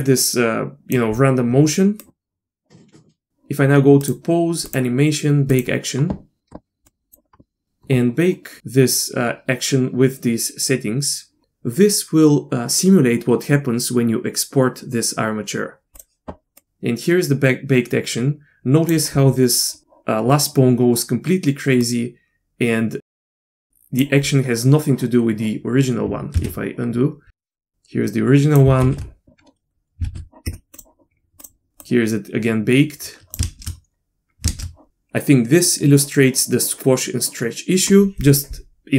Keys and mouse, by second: 2.0-3.3 drag, 4.2-16.0 drag, 16.5-18.9 drag, 21.8-24.0 drag, 26.4 ctrl+z, 27.4 ctrl+z, 27.5-28.6 drag, 28.8 ctrl+shift+z, 29.2 ctrl+shift+z, 30.1 ctrl+shift+z, 30.5 space, 31.8-33.3 drag, 33.4 shift+space, 34.5 shift+space.